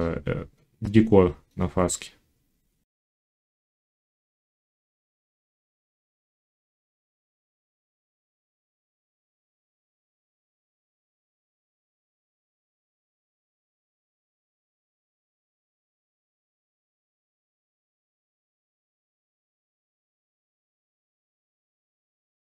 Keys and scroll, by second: 5.2 1, 9.3 alt+s, 11.3 s, 12.6 ctrl+z, 14.8 a, 15.6 7, 16.1 s, 21.8 j.